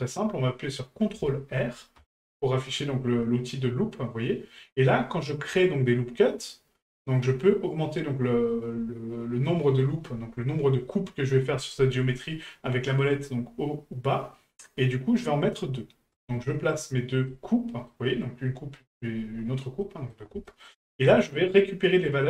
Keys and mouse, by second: 17.3-17.9 middle drag, 19.8 middle drag, 20.5 shift+middle drag.